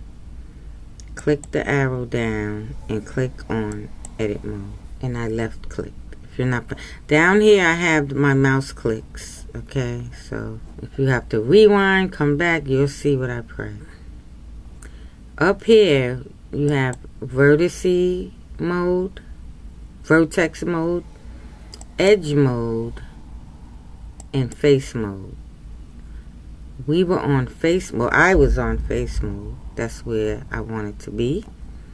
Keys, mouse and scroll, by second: 4.1-8.8 drag, 17.0-31.9 drag.